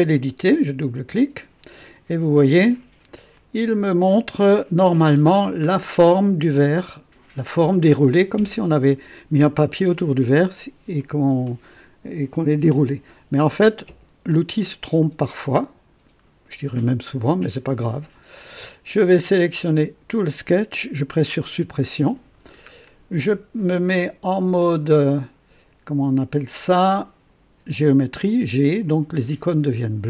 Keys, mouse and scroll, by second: 0.7 click, 2.1-2.4 scroll up 2, 3.3 click, 4.8 scroll up 2, 5.3 scroll down 2, 17.5 right click, 18.3 click, 19.0-19.8 drag, 21.3 Delete, 21.3 Delete, 22.4 scroll down 1, 22.9 right click, 24.6 click, 28.2 click.